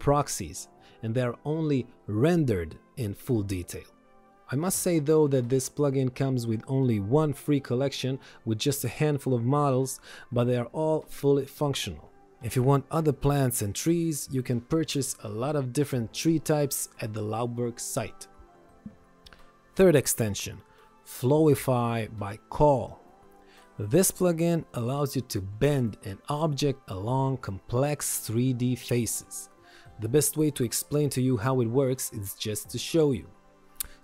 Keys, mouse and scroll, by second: 6.0 click, 19.7 click, 22.4 Delete, 24.8 click.